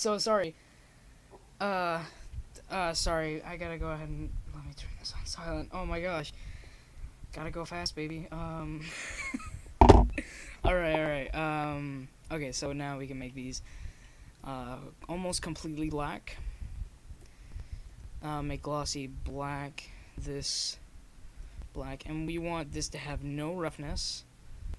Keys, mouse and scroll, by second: 3.2 middle click, 5.5 shift+z, 6.8 Tab, 7.8 right click, 8.5 Tab, 12.5-17.3 drag, 17.6 click, 19.4-21.5 drag, 22.4-24.2 drag.